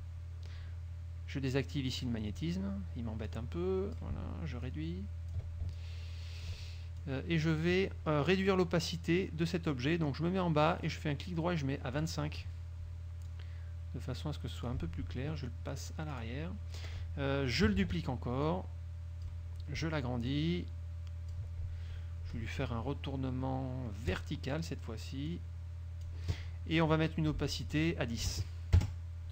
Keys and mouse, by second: 2.1 click, 3.4-4.3 drag, 4.8 ctrl+click, 5.9 ctrl+click, 7.1-7.9 ctrl+drag, 10.9 right click, 12.1 click, 13.4 click, 16.3 click, 17.9 ctrl+d, 18.6-19.6 drag, 20.4-21.6 ctrl+drag, 24.2 click, 25.4-26.3 drag, 27.5 click, 28.3 KP_1, 28.8 KP_0.